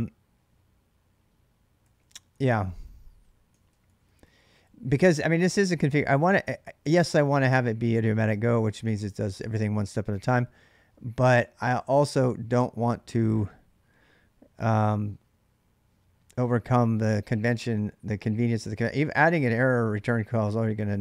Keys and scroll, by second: 1.6-9.2 typing, 4.9 ctrl+[, 11.9 Return, 18.7 ctrl+[, 18.7 ctrl+j, 19.0-21.0 typing.